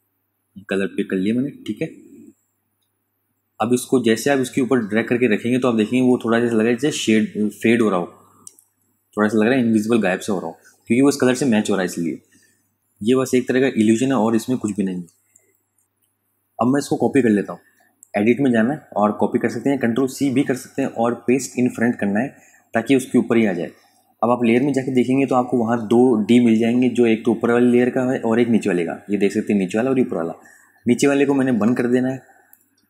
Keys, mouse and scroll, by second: 3.3 space, 3.6 click, 3.9 space, 4.5 click, 5.7 space, 5.9 click, 6.3 space, 6.4 click, 6.5 space, 7.5 click, 8.2 ctrl+space, 8.3 ctrl+click, 8.8 ctrl+space, 11.4 ctrl+alt+click, 14.2 space, 14.4 click, 14.8 space, 15.8 click.